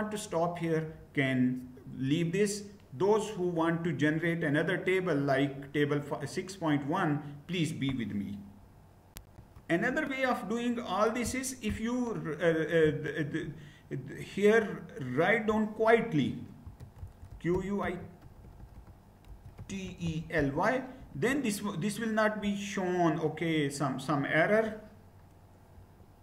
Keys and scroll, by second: 8.8 shift+F9, 16.0-20.5 typing, 20.6 Return, 26.0 shift+F9.